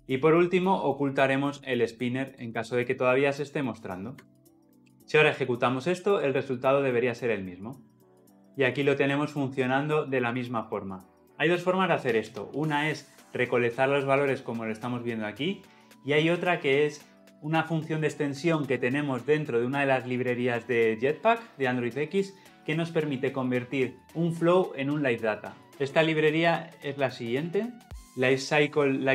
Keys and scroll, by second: 1.5 ctrl+x, 2.5 ctrl+v, 4.8 ctrl+alt+l, 6.1 shift+F10, 28.0 ctrl+v.